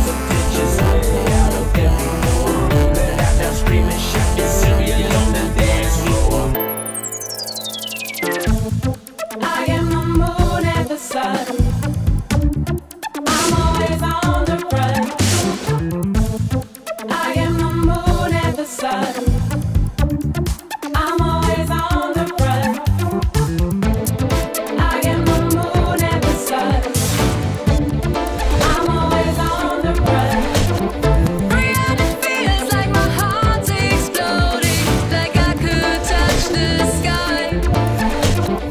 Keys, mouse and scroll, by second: 0.3 right click, 0.4 click, 0.7 click, 2.5 click, 6.6-8.3 drag, 8.3 right click, 10.4-15.2 drag, 19.9-20.3 drag, 21.4-21.9 drag, 27.6 click, 30.2-31.1 drag, 31.7-33.6 typing, 33.8 Return, 34.1 Return, 34.8 click, 35.4 click, 35.6 click, 38.5-38.7 typing.